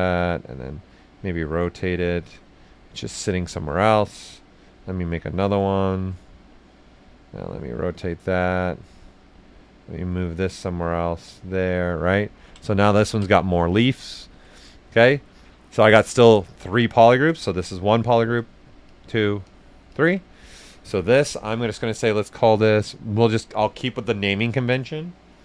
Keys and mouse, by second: 1.1 shift+click, 2.0 shift+right click, 2.9 right click, 4.5 ctrl+click, 5.4-7.3 ctrl+right drag, 7.3 click, 8.6 right click, 10.3 click, 11.5 right click, 12.7 q, 13.0 ctrl+click, 13.3 ctrl+alt+right click, 13.7 right click, 14.2 alt+right click, 17.3 alt+right click, 17.4 ctrl+shift+click, 22.8 click.